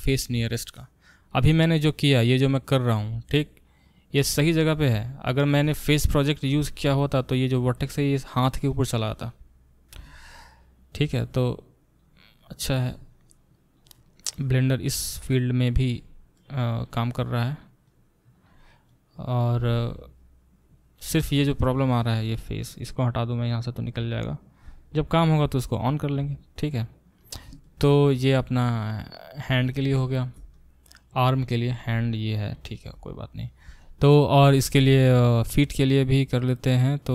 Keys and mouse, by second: 0.0 click, 0.1-1.3 middle drag, 0.4 f, 1.3-23.2 drag, 19.8 alt+middle click, 20.1 alt+middle click, 20.4-27.7 alt+middle drag, 26.7-37.1 drag.